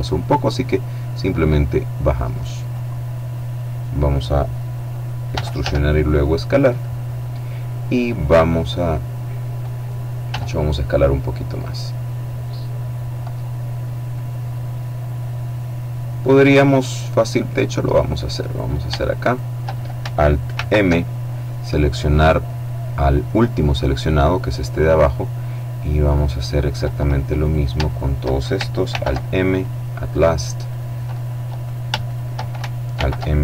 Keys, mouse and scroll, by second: 0.2-2.8 drag, 4.8 e, 5.1 s, 6.2 click, 6.7-7.7 scroll up 2, 9.8 s, 12.0 click, 14.0-16.3 middle drag, 16.3-17.0 scroll up 1, 18.0 right click, 18.8 shift+right click, 20.0 alt+m, 22.9 click, 25.6 right click, 26.9 right click, 28.4 alt+m, 29.1 click, 30.2 right click, 31.1 shift+right click, 32.4 alt+m, 33.0 alt+click.